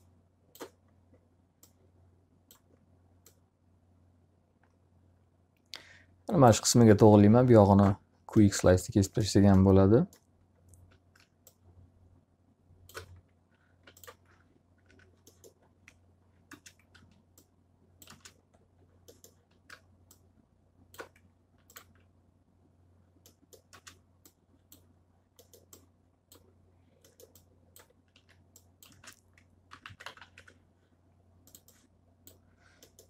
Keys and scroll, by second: 13.5 z, 14.7 F3, 15.7 F4, 16.3 space, 16.9 s, 17.9 space, 21.7 z, 23.5 space, 27.6 s, 28.7-30.2 typing.